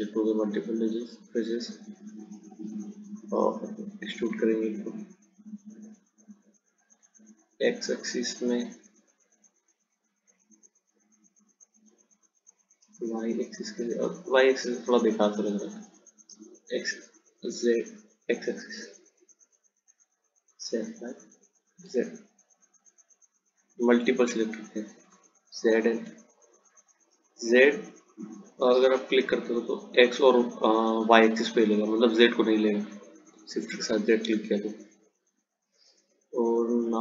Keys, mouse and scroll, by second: 2.1 ctrl+click, 4.1 click.